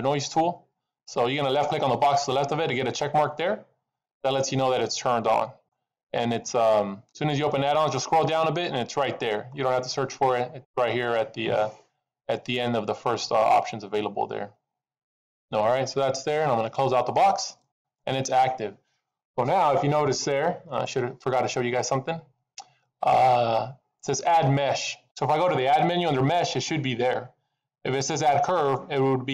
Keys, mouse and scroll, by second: 20.6 click.